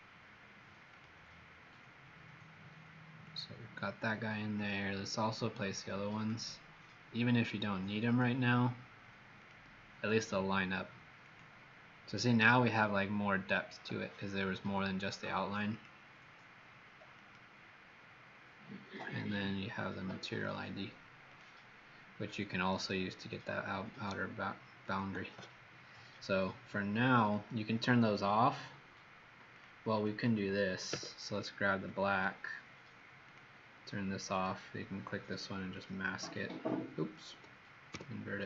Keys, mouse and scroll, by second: 29.8 click, 30.9 w, 31.3 click, 37.9 ctrl+i.